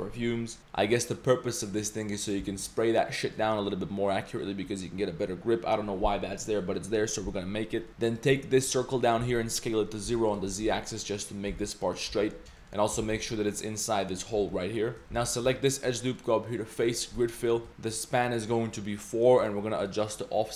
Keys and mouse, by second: 0.6 middle click, 1.8 middle click, 2.4 z, 7.9 alt+z, 8.1 alt+click, 8.3-8.6 middle drag, 9.2 s, 10.5 middle click, 11.5 g, 12.1 z, 12.2 click, 12.6 click, 12.9 g, 14.4 z, 14.5 drag, 15.0 z, 15.2 alt+click, 16.2-17.0 drag, 17.3 middle drag, 18.4 click, 19.5-20.5 drag.